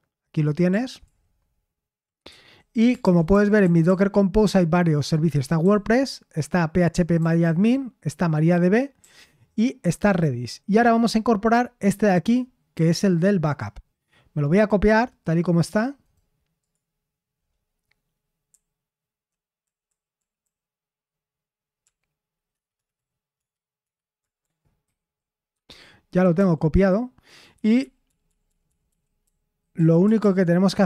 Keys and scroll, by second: 1.0 ctrl+d, 1.0 typing, 2.2 k, 3.0 ctrl+u, 3.3 ctrl+u, 3.6 ctrl+u, 3.8 ctrl+u, 5.6 ctrl+d, 6.9-7.6 typing, 9.0 ctrl+d, 18.5-19.6 typing, 21.8 o, 24.8 ctrl+v, 25.5 Escape, 25.5 typing, 26.3 ctrl+u, 27.3-30.2 typing, 30.6 Escape.